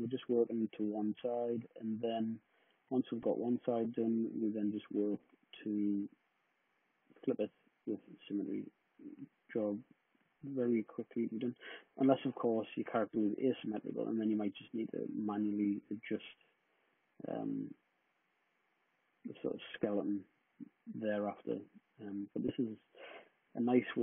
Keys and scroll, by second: 0.6 w, 19.2 super+z, 19.9 d, 23.2 w.